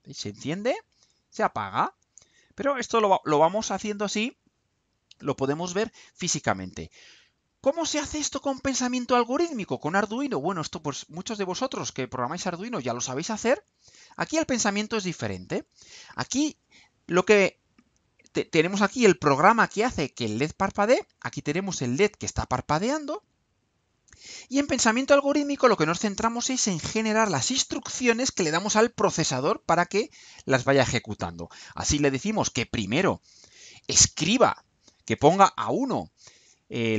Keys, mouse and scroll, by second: 7.7-9.5 drag, 11.2 click, 12.9-15.8 drag.